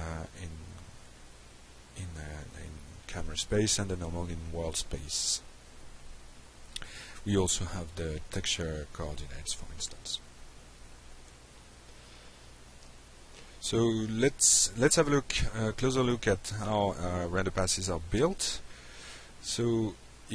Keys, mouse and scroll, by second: 0.3 click, 2.5 click, 3.4 click, 7.4 click, 8.3 click, 11.7 click, 12.0 click, 19.3 click.